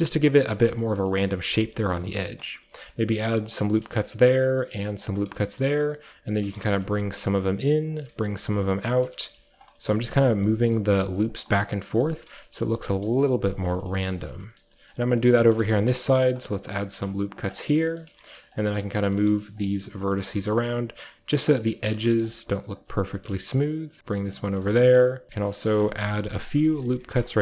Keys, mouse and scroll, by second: 0.0-3.2 typing, 1.0 shift+middle click, 1.3 shift+middle click, 1.7 shift+middle click, 1.8-2.3 shift+scroll up 1, 2.0-3.4 shift+middle drag, 2.3-3.4 shift+scroll down 1, 3.4-5.9 shift+drag, 5.3-7.6 typing, 6.3 click, 6.9 click, 7.9 click, 9.3 typing, 9.6-10.9 shift+drag, 10.9 typing, 11.3 shift+click, 12.7-14.1 typing, 13.0 click, 13.5 click, 14.2-14.7 shift+scroll down 1, 14.7-15.3 shift+scroll up 1, 15.3 scroll down 1, 15.3-17.0 typing, 15.3-16.5 scroll up 1, 16.5-18.0 drag, 17.0-18.5 scroll up 1, 18.1-22.5 typing, 18.5 click, 19.0 click, 19.6 click, 20.1 click, 20.5-21.6 middle drag, 20.7 click, 21.2 click, 22.3 click, 22.8 click, 23.1-24.0 scroll up 1, 24.0 click, 24.0 b, 24.1 g, 24.8 ctrl+r, 25.5 click, 25.7 shift+middle click, 26.4 click, 27.3 click.